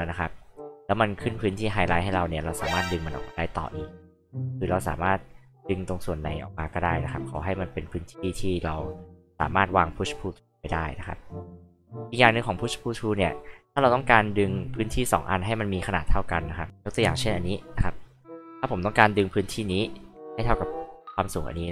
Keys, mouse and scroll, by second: 4.6 alt+click, 5.4-5.8 alt+scroll down 2, 5.8 alt+click, 6.8 alt+scroll up 2, 7.2 alt+click, 10.5-12.6 alt+drag, 14.4 alt+click, 17.0-18.2 alt+drag.